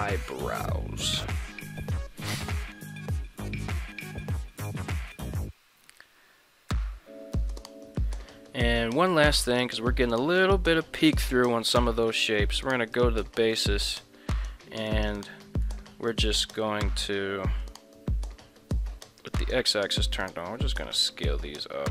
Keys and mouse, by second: 5.2 alt+r, 5.9 a, 6.7 alt+g, 7.3-8.0 middle drag, 9.6 right click, 10.0 ctrl+Tab, 10.4 right click, 11.0 middle click, 13.0 click, 13.6 Tab, 14.9 right click, 15.4 middle click, 16.1 right click, 19.2 click, 19.6 middle click, 20.2 alt+s.